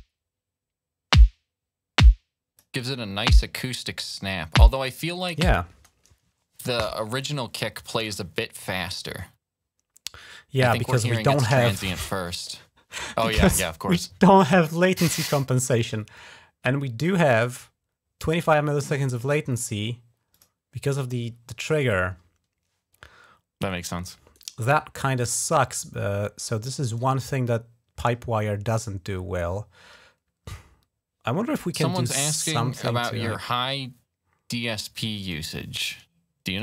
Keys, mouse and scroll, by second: 5.6 space, 15.6 click, 16.8 click, 17.1 click, 17.2 click, 20.1 click, 24.1 right click, 31.9 click, 33.2 click, 35.0 right click, 36.4 click.